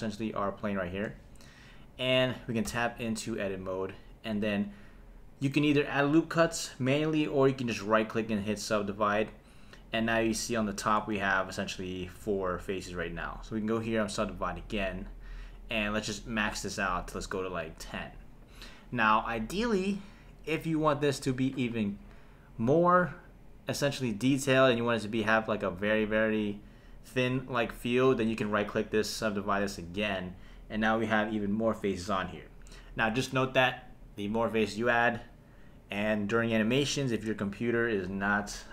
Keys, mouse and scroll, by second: 2.7 Tab, 7.9-9.4 right drag, 13.9 click, 15.9 click, 16.1 click, 16.2 click, 16.4 click, 16.6 click, 16.7 click, 16.9 click, 17.1 click, 17.3 click, 28.4-30.2 right drag.